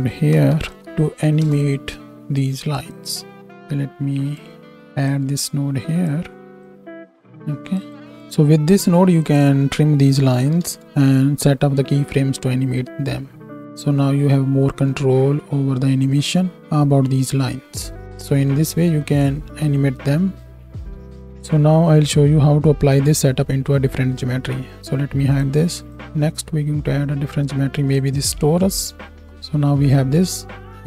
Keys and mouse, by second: 2.8-5.0 drag, 5.0-8.0 middle drag, 8.0-9.1 drag, 9.1-30.8 middle drag, 26.0 shift+a.